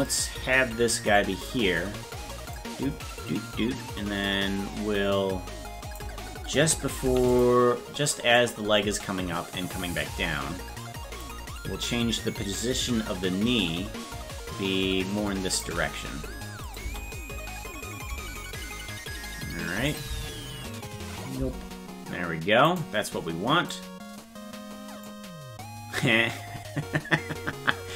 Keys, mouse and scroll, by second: 0.0-1.4 drag, 2.5-5.9 drag, 7.0 i, 8.4-11.2 drag, 12.6-15.6 shift+drag, 16.6 click, 16.8 space, 19.9 click, 20.0 space, 22.7 right click, 23.7-25.0 drag.